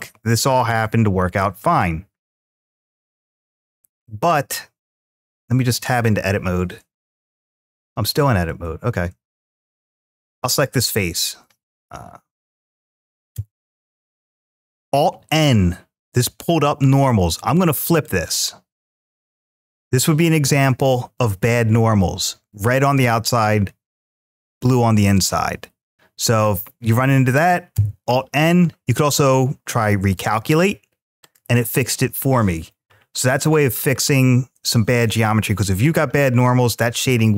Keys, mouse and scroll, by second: 1.2 scroll up 1, 2.1 click, 2.1 scroll up 3, 3.0 click, 3.8-5.8 middle drag, 6.9 click, 8.3 Tab, 9.2 click, 10.0 3, 10.3 click, 13.1 alt+n, 18.6 click, 19.1 middle click, 20.6 shift+middle click, 24.9 click, 27.5 alt+n, 31.0 click, 33.5-34.9 scroll down 3, 34.9 Tab, 36.9-37.2 shift+middle drag.